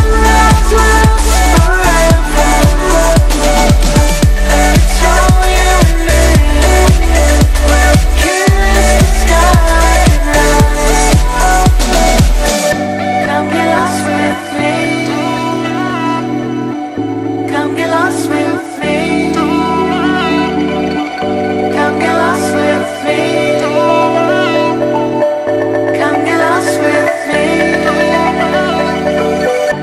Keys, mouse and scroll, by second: 0.7 space, 0.9 click, 1.1 space, 1.4 click, 26.7 space, 27.0 click, 27.1 space, 28.2 click, 29.5 space, 29.7 click.